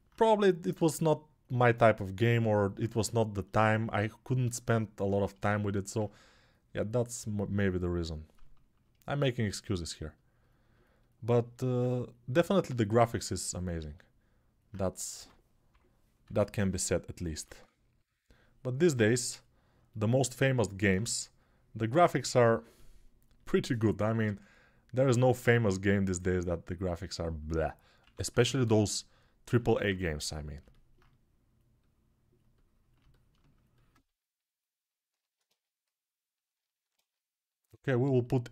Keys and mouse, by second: 14.9 2, 16.0 x, 16.4-17.2 [, 16.5-27.8 drag, 32.9-38.5 alt+shift+drag.